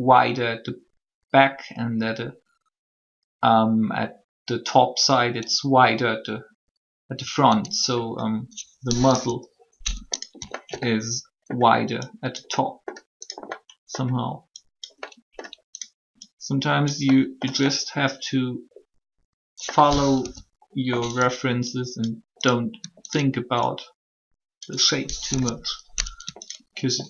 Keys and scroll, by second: 9.1 3, 20.1 1, 25.3 3.